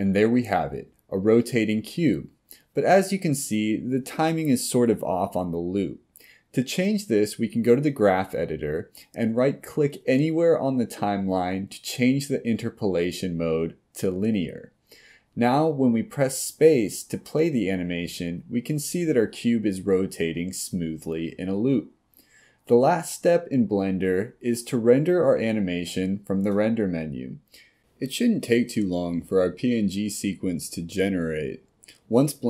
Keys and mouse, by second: 5.5 click, 6.5-9.1 drag, 11.7-14.1 right drag.